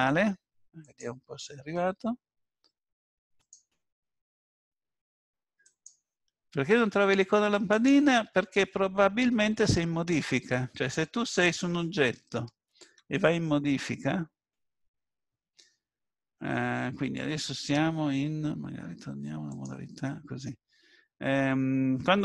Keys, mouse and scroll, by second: 8.7-9.1 scroll down 4, 11.7 click, 12.8 Tab, 14.0-14.5 scroll up 2, 19.7 click.